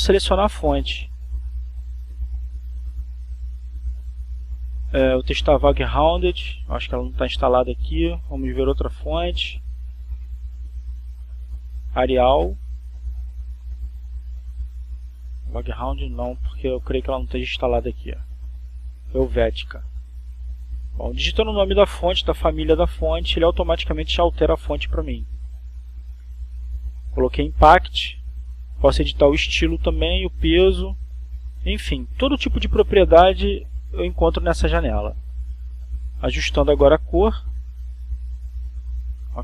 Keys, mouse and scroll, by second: 1.1-2.0 drag, 2.2 click, 3.8 shift+v, 4.9 Caps_Lock, 5.8 g, 7.2-9.3 typing, 10.7 click, 11.3 click, 13.6-14.9 typing, 16.1 click, 17.1-18.1 typing, 20.1 BackSpace, 21.5-23.4 typing, 25.2 click, 26.6-28.4 typing, 31.2 click, 32.7-36.3 drag, 37.7-38.7 drag, 39.1-39.4 drag.